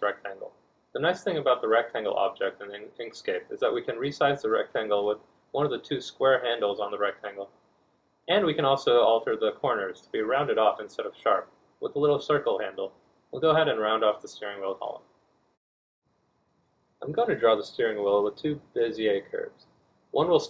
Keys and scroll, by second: 6.3 ctrl+z, 10.3 z, 15.5 F1.